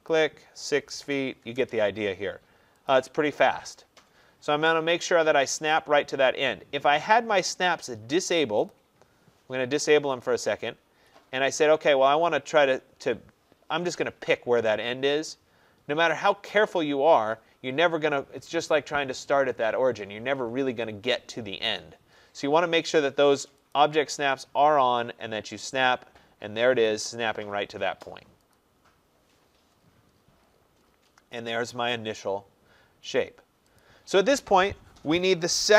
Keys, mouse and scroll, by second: 0.1 click, 0.8-1.6 typing, 2.9 click, 8.7 click, 10.8 middle click, 10.8 middle click, 10.9 middle click, 10.9-11.4 scroll, 14.0 scroll, 16.9-17.7 scroll, 23.8 click, 27.1 click, 29.4-31.5 scroll, 31.5-33.6 scroll, 33.8 click.